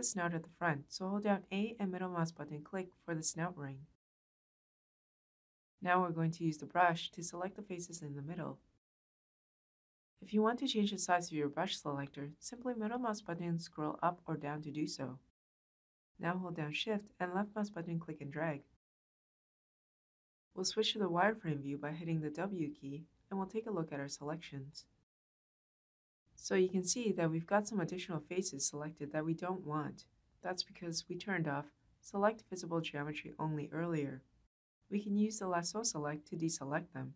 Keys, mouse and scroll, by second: 3.0 a, 3.8 middle click, 11.2 middle click, 14.1-15.5 middle drag, 14.1-14.8 scroll up 2, 14.8-15.5 scroll down 2, 17.0-19.0 shift+drag, 21.2 w.